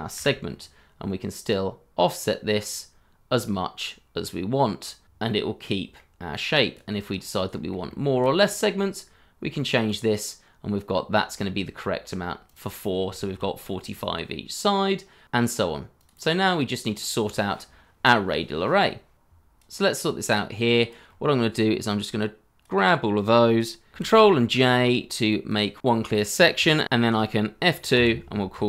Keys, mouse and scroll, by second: 0.1 Delete, 4.8 shift+z, 5.6 middle click, 6.1 Return, 6.1 3, 7.0-7.5 scroll up 1, 7.5 middle click, 7.8 shift+middle click, 8.3 scroll up 1, 11.3 middle click, 12.7-13.0 scroll down 1, 13.1 shift+middle click, 13.5 scroll up 1, 15.6 double click, 16.0 scroll down 1, 17.0 scroll down 1, 17.4 shift+middle click, 17.7-18.6 scroll down 1, 18.8 shift+middle click, 19.0 scroll up 1, 24.6 ctrl+j, 25.4 shift+middle click.